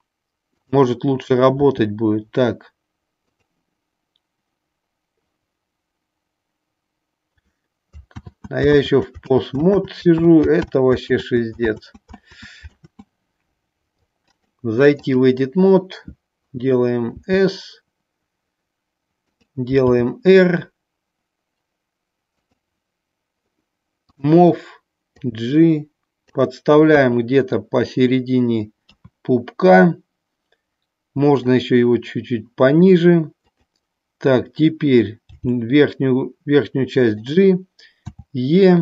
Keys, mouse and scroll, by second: 0.6 click, 3.2 click, 8.8 ctrl+z, 9.3 ctrl+z, 9.8 ctrl+z, 10.2 ctrl+z, 10.7 ctrl+z, 11.2 ctrl+z, 11.8 ctrl+z, 12.2 ctrl+z, 14.2 click, 19.3 click, 22.3 click, 25.0-26.2 drag, 26.9 KP_1, 28.8 KP_3, 31.6-32.8 drag, 33.3 click, 37.2 click.